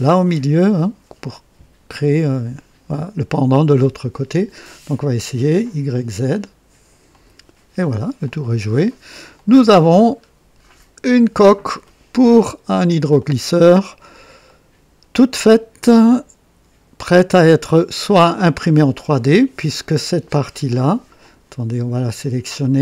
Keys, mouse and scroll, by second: 4.9 click, 5.9 click, 7.0 click, 8.2-9.2 drag, 9.3 click, 10.0 scroll up 1, 10.6 scroll down 1, 11.1-12.9 drag, 13.1-14.3 drag, 14.4 right click, 15.1-17.8 drag, 18.0 click, 19.6 right click, 20.6 click, 21.1 click, 22.4 right click.